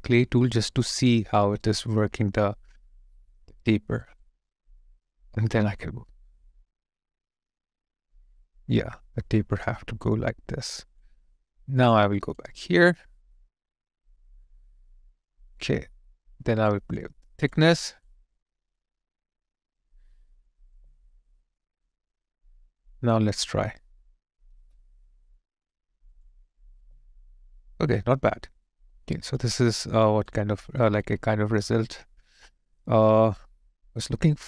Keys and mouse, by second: 1.6 alt+right click, 12.4 alt+click, 20.7 alt+click, 24.6 space, 26.8 alt+click, 30.8 alt+click, 31.8 alt+right click, 32.7 alt+click.